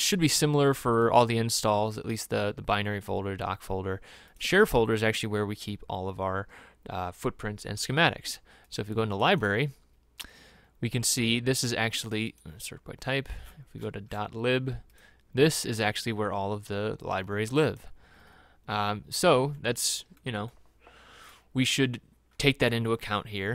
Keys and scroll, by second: 13.6 scroll down 1, 14.2 scroll down 1.